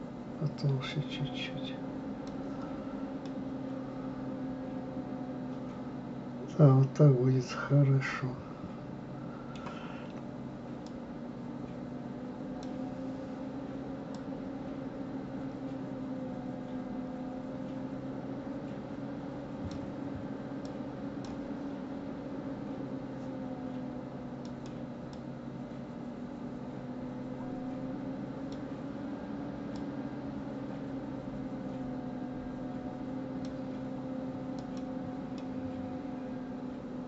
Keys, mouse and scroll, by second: 3.2-6.2 middle drag, 10.9-13.8 drag, 14.1-17.1 drag, 20.6-23.8 drag, 25.1-28.1 drag, 29.8-32.8 drag, 34.6 click, 35.4-37.0 middle drag.